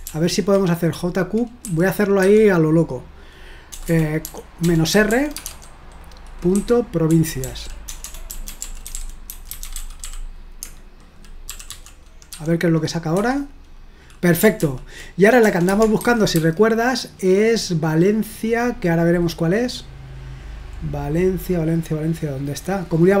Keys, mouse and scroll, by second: 0.1 ctrl+p, 1.6-2.2 typing, 3.7-10.5 typing, 11.6-12.3 typing, 13.2 Return, 14.6 ctrl+p, 15.5-16.3 typing, 19.6-20.2 scroll up 1, 20.8-21.9 scroll up 1, 22.4-23.2 scroll down 1.